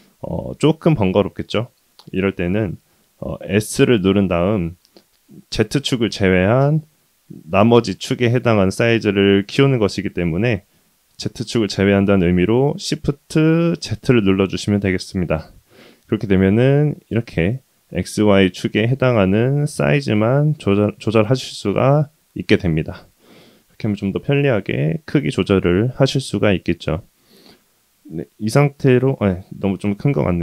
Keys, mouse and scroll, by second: 0.3-1.1 scroll down 2, 1.1-1.8 middle drag, 3.6 s, 27.6-29.2 middle drag, 30.2 s.